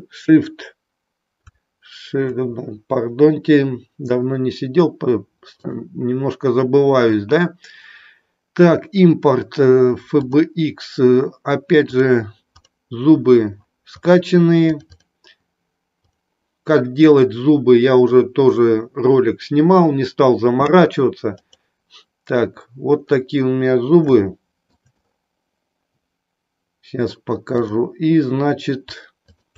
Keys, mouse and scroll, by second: 5.7-10.6 drag, 24.1-24.7 shift+middle drag.